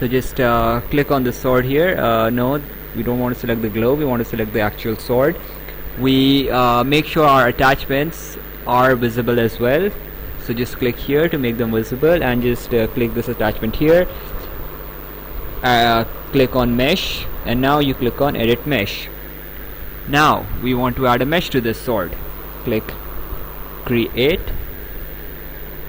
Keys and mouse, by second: 4.0 click, 8.7 click, 13.9 click, 18.4 click, 23.8 click, 24.6 right click.